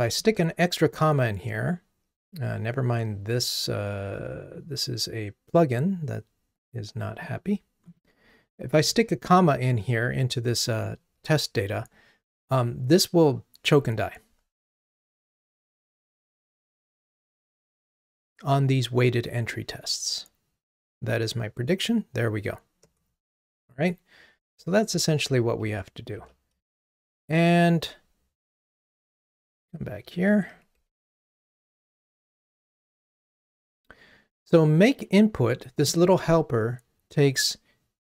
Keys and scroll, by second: 14.7 ctrl+r, 24.6 super+z.